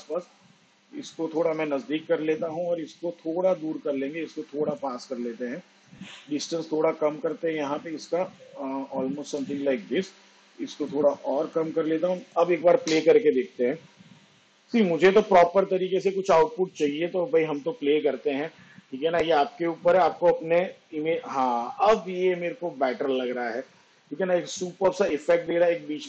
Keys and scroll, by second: 13.0 space.